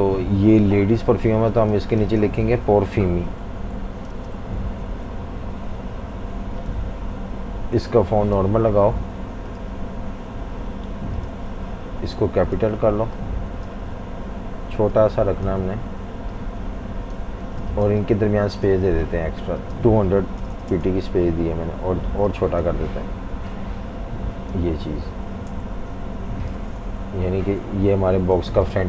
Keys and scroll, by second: 2.4 super+a, 3.1-5.5 typing, 17.5 v, 17.6 space, 20.0-21.0 typing, 25.5 Left, 25.6 Left, 25.8 Left, 25.9 Left, 27.0 super+=, 27.8 super+-, 28.0 super+-, 28.5-28.8 typing.